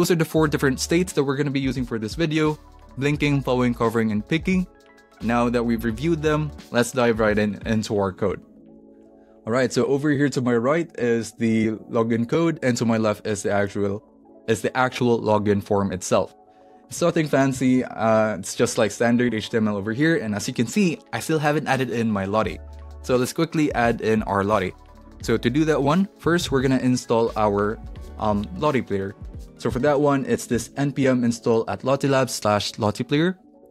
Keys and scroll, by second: 17.6 super+s, 26.4 ctrl+fn+`, 29.7 Down, 30.5 Up.